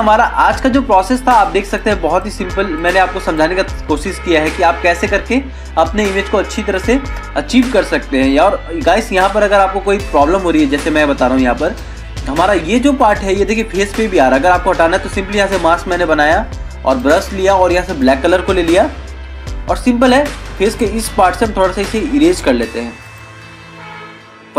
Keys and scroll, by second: 1.3 ctrl+-, 5.0 ctrl+=.